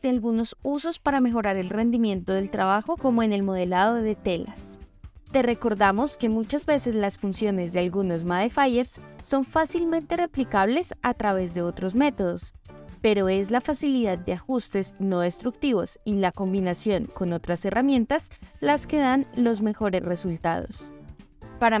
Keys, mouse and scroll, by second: 2.4 click, 2.9-3.9 drag, 4.1-4.8 middle drag, 5.4 click, 6.5-7.9 drag, 8.9 click, 10.8 click, 13.3-16.5 middle drag, 17.9-18.6 middle drag.